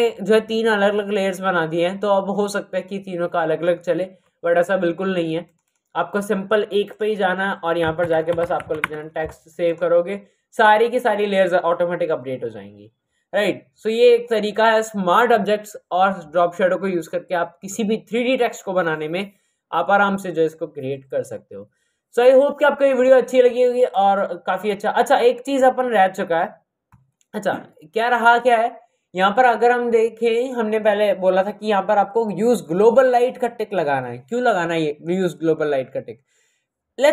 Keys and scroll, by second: 7.9-8.6 typing.